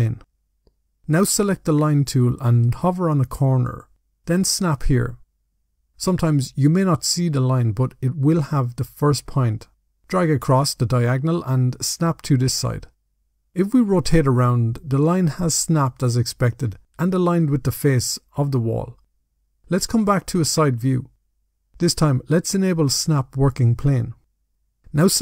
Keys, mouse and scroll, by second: 1.3 click, 2.0-4.5 scroll up 5, 4.5 click, 11.1 click, 12.7-13.1 scroll down 2, 13.3 middle click, 15.9 middle click, 17.1 scroll down 1, 17.3 middle click, 20.3 click, 22.7 click.